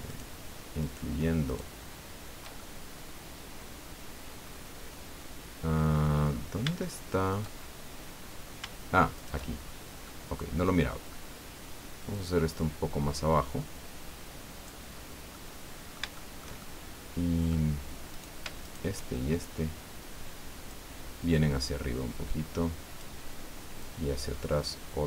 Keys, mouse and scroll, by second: 0.1 shift+right click, 0.8 shift+right click, 1.4 shift+right click, 2.6-6.2 shift+middle drag, 6.3 scroll up 1, 6.7 shift+middle click, 7.5-8.2 shift+scroll up 2, 9.1 shift+right click, 9.6 shift+scroll down 2, 10.0-11.3 drag, 12.1-14.8 drag, 15.3-17.7 drag, 18.1 right click, 18.6 shift+right click, 20.7-23.2 drag, 23.8-25.0 drag.